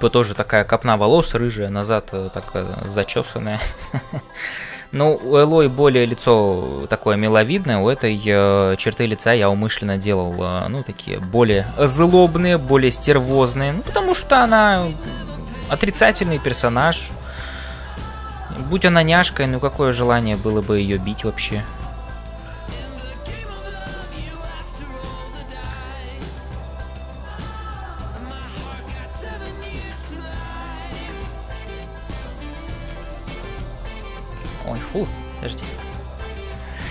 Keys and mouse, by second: 0.0-36.9 typing, 3.4 middle click, 4.1-5.3 middle drag, 7.5 click, 16.5 click, 20.8 click, 23.8 click, 27.2 click, 30.3 click, 31.4 click, 32.8 click, 33.3 shift+click, 34.5 ctrl+z, 35.9 click.